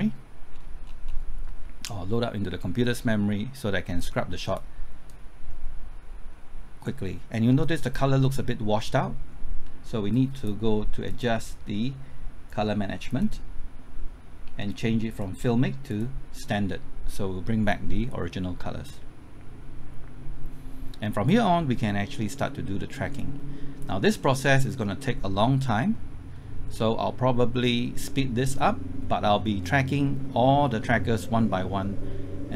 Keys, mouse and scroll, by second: 0.5-1.4 scroll down 1, 1.4-3.5 scroll up 1, 3.9-21.8 drag, 24.2 middle click, 25.9-26.3 scroll up 1, 26.3-26.7 scroll down 1, 28.9 scroll up 1, 30.4-32.5 scroll down 1.